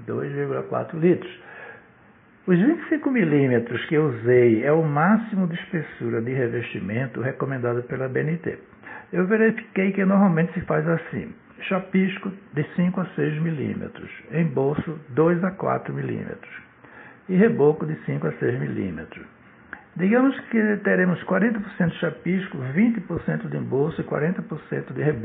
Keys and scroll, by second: 21.0 Return.